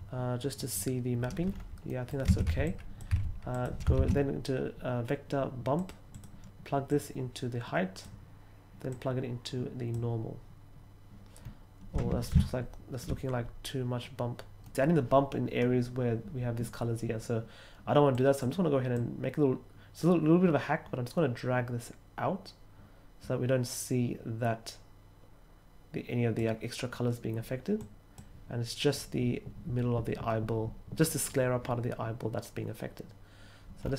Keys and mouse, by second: 1.8 middle click, 2.0-3.9 typing, 2.6 drag, 3.5 click, 5.7 click, 6.1 click, 6.8-8.0 drag, 8.9-9.9 drag, 14.6 middle click, 18.1 click, 18.9-26.3 drag, 27.7 click.